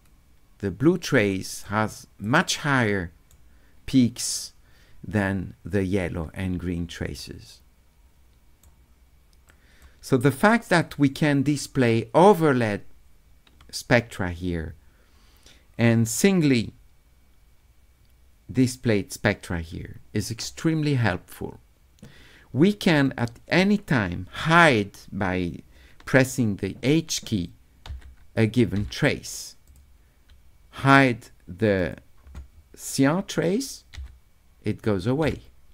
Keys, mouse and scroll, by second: 2.2-3.3 right drag, 7.2-8.6 right drag, 9.5 click, 10.8-11.9 drag, 23.1 click, 29.7 click, 31.8 click.